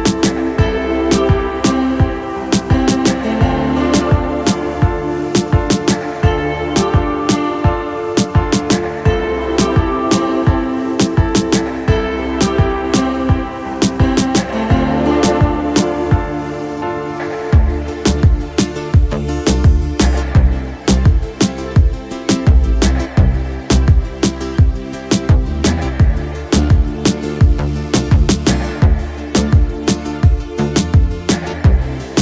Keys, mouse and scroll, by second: 0.9 click, 1.6-2.8 middle drag, 3.8-4.3 middle drag, 3.8 z, 5.4-7.3 middle drag, 7.7-14.7 middle drag, 15.0 z, 16.6-18.0 drag, 18.0 middle click, 18.6-21.5 middle drag, 21.8-22.1 shift+middle drag, 22.4-22.7 middle drag, 22.9 shift+middle drag, 23.5-24.3 middle drag, 25.3-26.7 middle drag, 27.1 shift+middle drag, 27.6 middle drag, 28.1 shift+middle drag, 28.9-30.2 middle drag, 30.4-30.7 shift+middle drag, 31.0-32.2 middle drag.